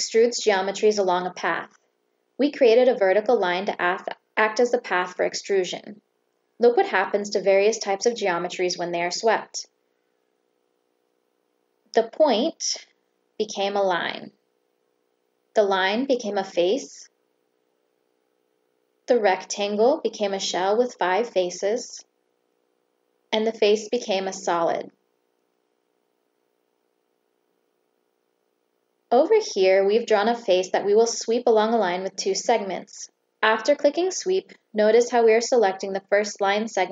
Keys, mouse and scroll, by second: 8.6 right click, 11.6 Escape, 14.4 click, 16.7 Escape, 17.1 click, 18.4 Escape, 23.0 click, 24.5 Escape, 29.6 click, 33.6 click, 35.5 click.